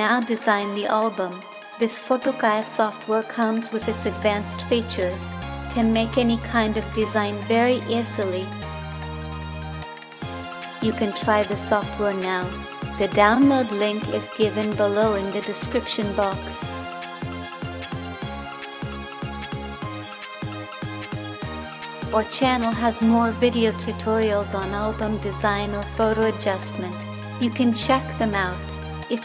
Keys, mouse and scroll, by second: 0.4 space, 1.0 space, 18.2 ctrl+-, 19.5 space, 20.1 space.